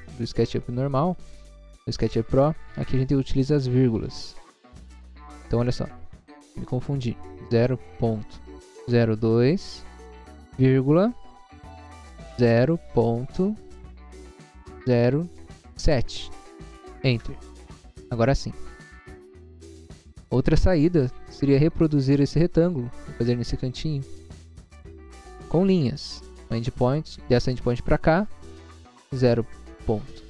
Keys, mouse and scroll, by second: 7.5-9.3 typing, 10.9 ,, 12.5 0, 13.0 ., 14.8 0, 16.1 7, 17.2 Return, 19.2 scroll down 1, 20.3 scroll down 1, 20.9 scroll down 1, 22.5 click, 22.7 scroll down 1, 23.2 scroll up 1, 23.8 scroll up 1, 24.2 middle click, 24.7 middle click, 25.0 scroll up 1, 26.3 click, 29.2 0, 29.9 ..